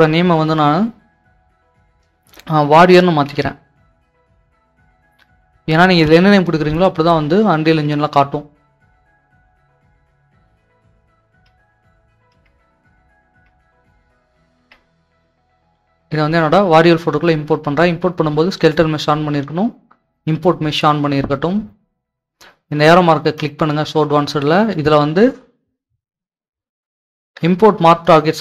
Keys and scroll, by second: 3.1-5.2 typing, 6.0 Return, 7.7 alt+Tab, 8.9 alt+Tab, 8.9 typing, 11.4 alt+Tab, 12.3 alt+Tab, 14.6 alt+Tab.